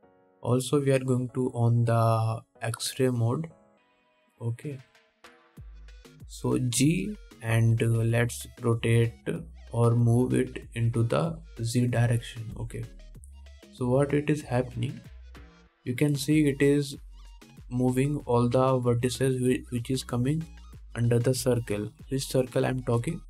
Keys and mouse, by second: 8.0 g.